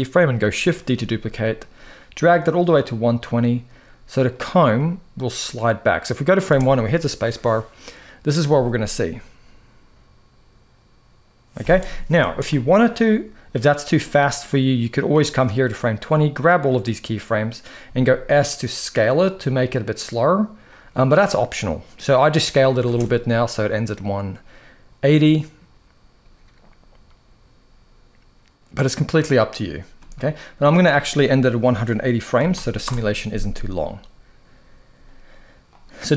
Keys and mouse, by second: 0.5 shift+d, 4.0-6.1 drag, 6.2 space, 11.9 space, 13.6-14.8 drag, 15.9-16.4 drag, 17.6 s, 22.6 space, 29.7 space, 30.4-32.6 drag, 35.4-36.1 drag.